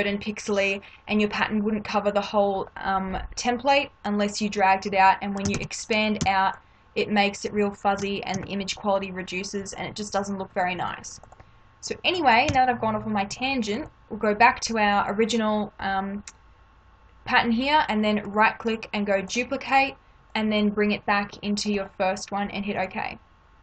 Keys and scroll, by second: 5.5 ctrl+t, 8.3 Return, 12.5 Delete.